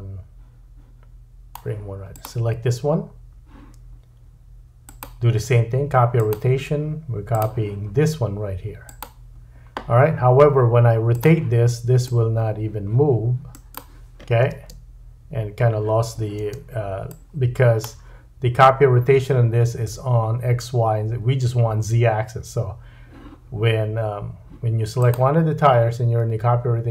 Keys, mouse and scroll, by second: 2.2-4.8 middle drag, 4.8-7.4 drag, 7.4-11.1 middle drag, 11.1-13.7 drag, 13.7-17.1 middle drag, 14.5 space, 16.5 space, 17.1-25.1 drag, 25.1-26.9 middle drag.